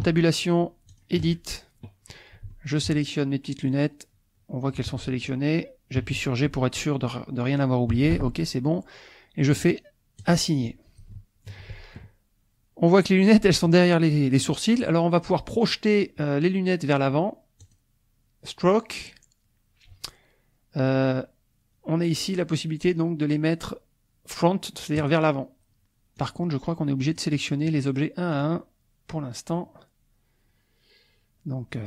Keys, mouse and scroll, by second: 0.1 ctrl+Tab, 0.9 ctrl+click, 2.5 shift+click, 6.0 g, 7.9 Escape, 10.2 click, 11.1 shift+middle click, 17.6-18.7 drag, 25.0 click, 26.2 click, 27.1 click, 28.3 click.